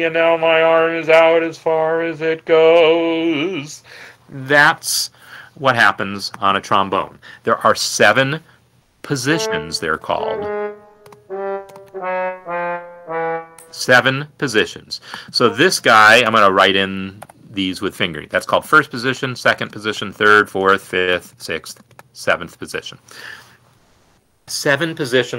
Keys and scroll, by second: 9.2 typing, 10.3 typing, 10.5 Down, 11.5-13.3 typing, 14.0 Escape, 16.7 ctrl+alt+f, 17.6 typing, 19.1-22.6 typing, 22.8 Escape.